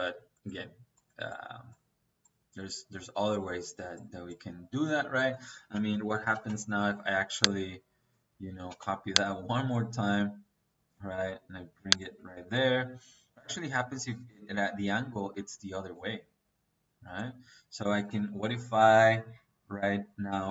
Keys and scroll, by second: 5.2 Escape, 5.6-6.4 typing, 8.6 space, 11.9 Escape, 17.7 Escape, 20.2 Escape.